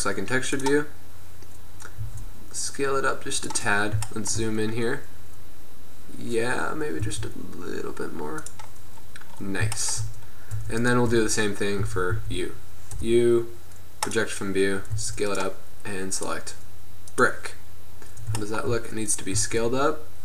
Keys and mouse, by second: 1.6-2.4 middle drag, 2.4 s, 7.2 s, 10.8 Tab, 11.0 right click, 11.2 Tab, 11.9 a, 12.3 a, 13.1 u, 15.0 s, 16.3-18.0 drag, 18.0-18.5 middle drag, 19.8 s.